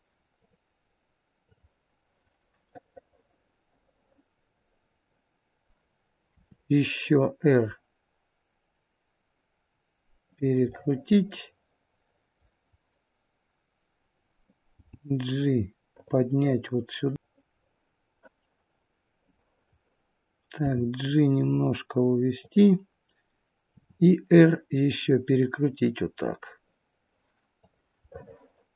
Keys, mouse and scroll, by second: 2.6 middle click, 6.3 r, 10.6 middle click, 14.6 g, 17.1 middle click, 17.5-18.0 scroll down 1, 19.2 click, 20.5 g, 23.7 r, 28.0 middle click.